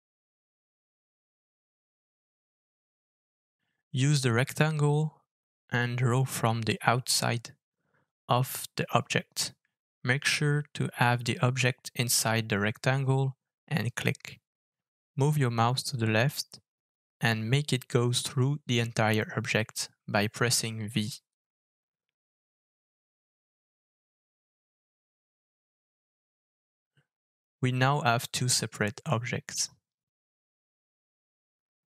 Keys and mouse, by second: 0.2-2.1 middle drag, 2.1 KP_1, 3.4-4.0 shift+middle drag, 23.9-26.5 middle drag, 27.1-27.6 middle drag, 27.8 click, 28.5 click, 29.9-30.9 middle drag, 31.7-31.9 drag.